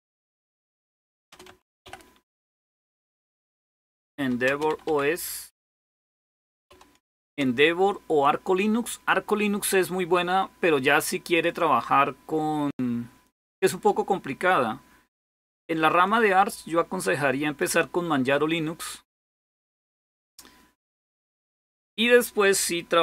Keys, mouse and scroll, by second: 0.0-7.1 typing, 11.3-21.9 drag, 22.8-23.0 typing.